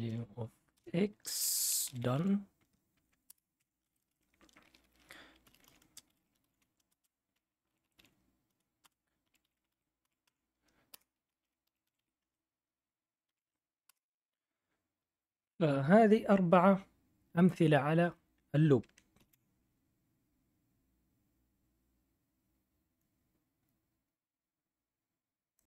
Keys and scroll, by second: 0.0-7.7 typing, 0.7 Return, 3.2 Return, 9.1-13.8 typing, 19.1 ctrl+l.